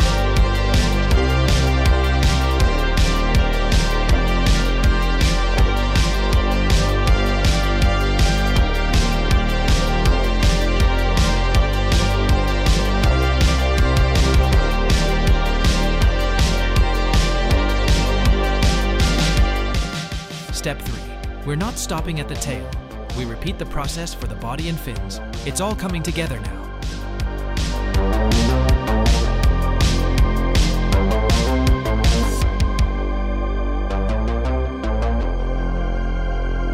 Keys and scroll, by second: 1.0 shift+d, 4.8 space, 9.2 space, 11.3 ctrl+c, 11.6 ctrl+c, 14.2 ctrl+shift+v, 16.0 space, 24.1 space, 27.2 r, 27.7 z, 28.0 z.